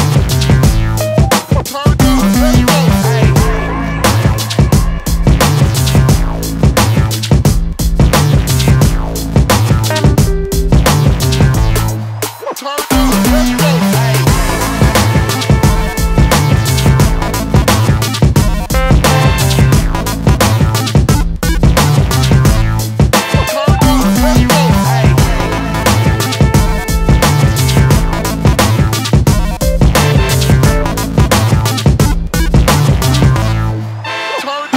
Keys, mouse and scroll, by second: 0.3 click, 2.2 KP_7, 3.7 shift+d, 7.2 middle click, 8.5 r, 12.6 middle click, 13.3 KP_7, 14.4 click, 15.2-16.3 scroll down 3, 16.3 s, 18.0 shift+d, 20.6-21.0 scroll down 2, 21.0 middle click, 22.4 KP_7, 23.4 click, 25.0 shift+d, 29.3-30.6 scroll down 3, 30.6 click, 32.9 shift+d.